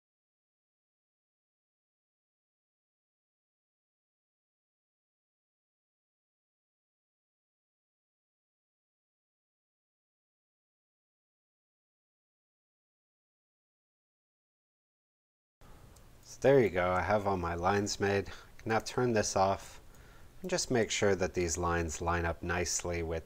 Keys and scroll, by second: 2.1 super+z, 2.8 super+space, 5.0 super+z, 15.9 space, 19.6 space.